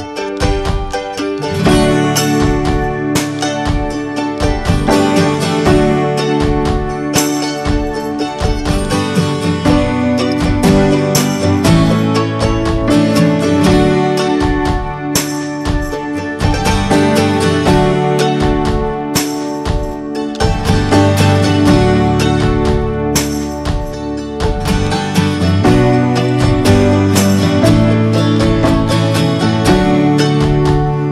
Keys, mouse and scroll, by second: 1.7 click, 2.0-2.7 scroll down 3, 2.2 middle click, 2.7 middle click, 2.9 scroll up 2, 3.4 ctrl+z, 3.6-7.3 scroll up 1, 7.3 scroll up 1, 7.5-10.8 middle drag, 10.8 click, 11.1-12.6 scroll down 5, 11.4 middle click, 12.0 middle click, 12.6 ctrl+z, 13.8 shift+middle click, 14.0 scroll up 3, 14.2-15.2 middle drag, 15.2-16.8 scroll up 1, 16.8 click, 17.4 ctrl+z, 19.2 click, 19.5-20.1 scroll down 4, 19.8 middle click, 20.4 middle click, 20.6-22.4 scroll up 5, 21.0 shift+middle click, 21.3 middle click, 22.4-23.5 drag, 23.5-27.1 middle drag, 23.8 scroll up 1, 27.1-27.6 scroll up 2, 27.6-28.8 shift+middle drag, 28.8 click, 29.1 scroll down 3, 29.3 middle click, 29.7 ctrl+z, 29.8 scroll up 2, 30.9 click.